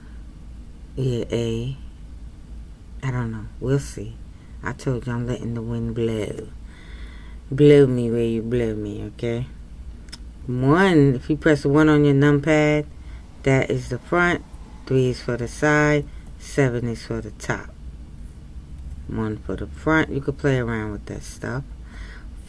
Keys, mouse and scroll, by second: 10.4 KP_1.